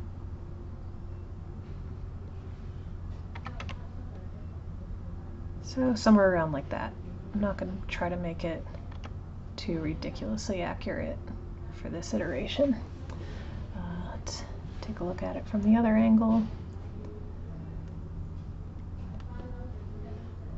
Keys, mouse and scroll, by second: 2.2 click, 7.2 click, 8.4 click, 8.9 g, 14.1 click, 18.8 click.